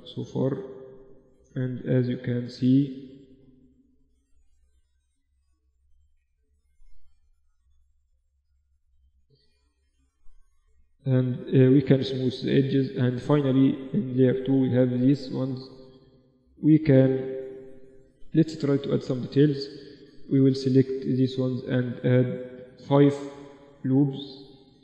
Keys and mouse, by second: 0.3 ctrl+r, 1.3 ctrl+r, 2.4 Tab, 3.6 Tab, 4.2 ctrl+r, 5.3 ctrl+r, 6.2 ctrl+r, 7.6 ctrl+r, 8.4 Tab, 11.6-13.3 drag, 11.7 t, 13.4-15.4 drag, 14.0 a, 14.6-17.2 right drag, 15.8 z, 17.8 middle click, 18.0 Tab, 19.3 ctrl+r, 23.6 ctrl+r.